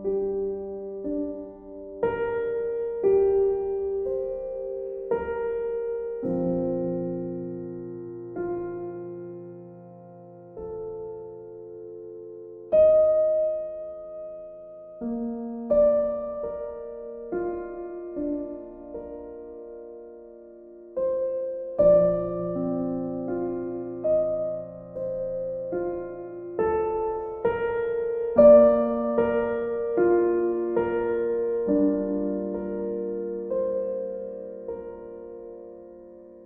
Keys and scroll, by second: 13.3 ctrl+z, 23.9 ctrl+z, 24.3 ctrl+z, 34.2 ctrl+u.